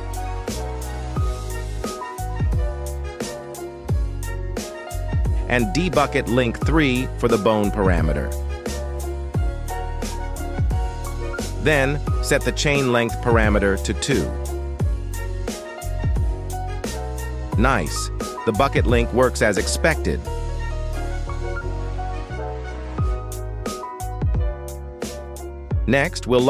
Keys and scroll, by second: 4.4 u, 4.9 k, 10.6 x, 15.9 alt+r, 16.3 x, 18.8 Escape, 19.2 z, 20.6 r, 20.9 x, 22.5 Escape, 24.2 g, 24.4 x, 25.7 Escape.